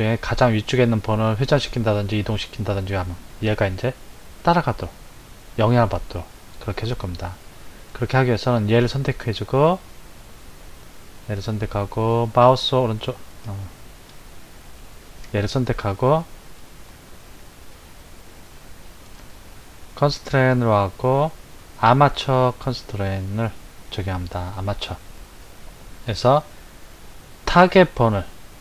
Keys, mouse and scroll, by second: 7.2 click, 8.7 click, 12.2-13.4 right drag, 13.4 click, 14.7 click, 18.8 click, 20.0-23.1 drag.